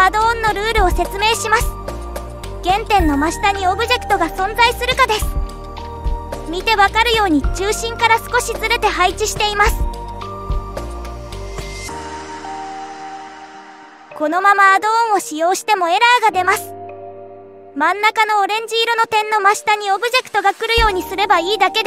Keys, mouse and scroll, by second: 0.2-0.8 shift+middle drag, 1.3 middle click, 2.4-2.9 middle drag, 3.4-4.2 scroll down 1, 4.5-6.3 middle drag, 6.8 click, 11.1 KP_7, 13.8 scroll up 3, 15.2 shift+click, 15.9-21.8 right drag.